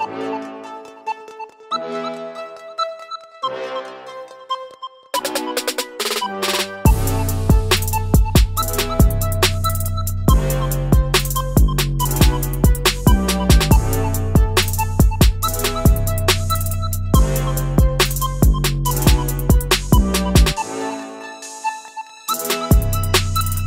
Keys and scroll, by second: 4.7 ctrl+z, 5.0 ctrl+z, 12.0 ctrl+z, 14.0 ctrl+z, 16.4 ctrl+z, 21.6 Escape.